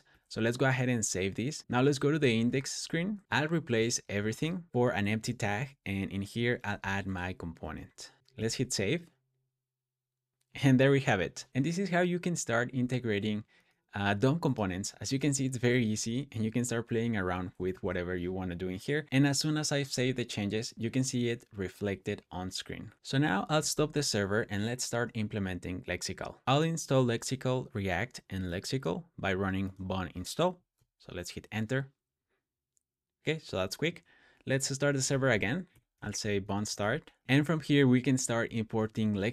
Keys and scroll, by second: 2.0 super+p, 3.6-7.0 typing, 6.2 Tab, 6.5 Escape, 7.6 super+., 8.2 super+s, 15.8 o, 17.5 super+s, 23.8 Return, 26.4 typing, 30.3-31.1 typing, 34.6-39.3 typing.